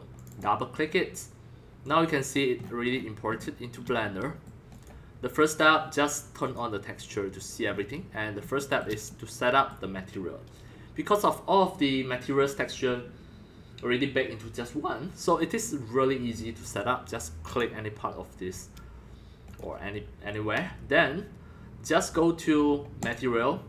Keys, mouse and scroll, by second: 0.1 click, 0.3 click, 1.8 click, 2.6-4.4 middle drag, 2.6-3.4 scroll up 10, 4.7 click, 5.0-7.7 drag, 7.7-8.1 scroll up 4, 8.1 scroll down 1, 8.1-8.4 middle drag, 8.4 scroll, 8.6-9.8 shift+middle drag, 10.3 middle click, 10.3 scroll up 2, 10.9 middle click, 15.8 middle click, 17.4 click, 17.6 click, 17.8-19.0 drag, 19.5 click, 20.8-21.8 drag, 23.0 click, 23.2-23.6 drag.